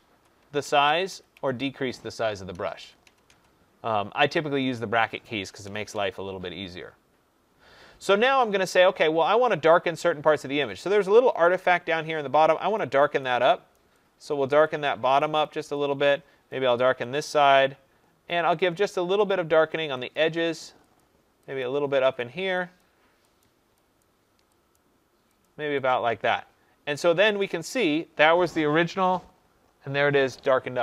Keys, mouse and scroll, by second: 0.0-4.1 typing, 5.9 2, 10.1 [, 12.7 click, 13.1 click, 13.7 click, 14.1 click, 15.3 click, 16.0 click, 16.6 click, 17.1 click, 17.5 click, 18.6 click, 19.2 click, 20.1 click, 20.9 click, 21.6 click, 22.1 click, 22.8 click, 23.4 click, 23.9 click, 24.7 click, 25.4 click, 25.8 click, 27.3 click, 29.0 click.